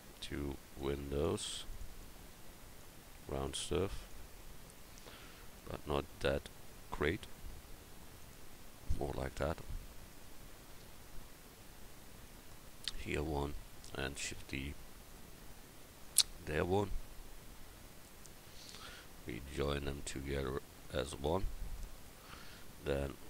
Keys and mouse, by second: 7.2 s, 14.2 shift+d.